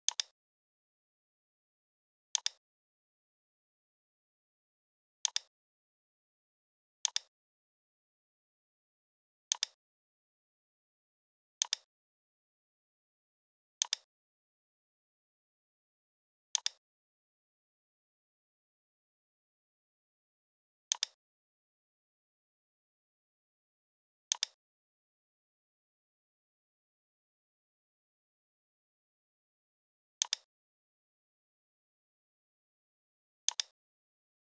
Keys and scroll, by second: 15.9 v, 17.7 l, 23.8 v, 27.1 i.